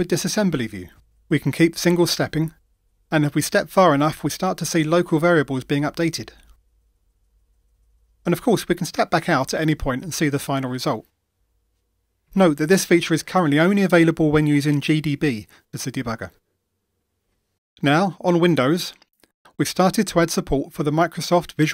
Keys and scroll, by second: 0.2 F8, 11.3 shift+F8, 15.3 F8.